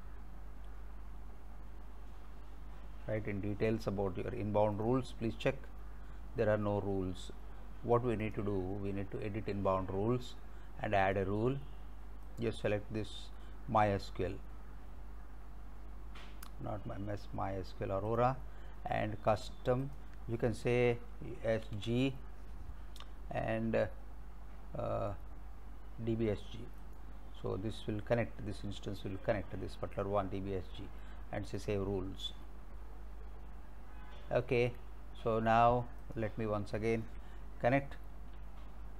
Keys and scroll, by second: 21.5 s, 21.8 g.